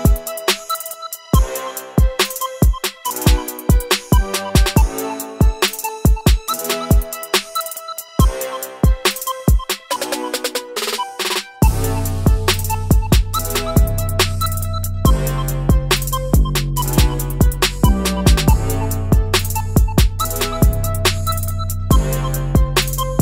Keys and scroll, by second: 6.0 Down, 9.9 ctrl+c.